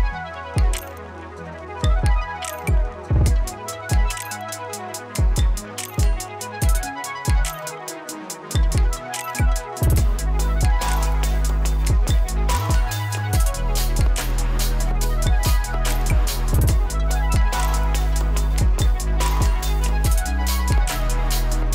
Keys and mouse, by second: 1.9 space, 2.4 right click, 3.1 click, 5.6 ctrl+a, 6.2-7.1 typing, 8.0-14.8 drag, 16.1 Return, 17.2-18.5 drag, 18.5 space.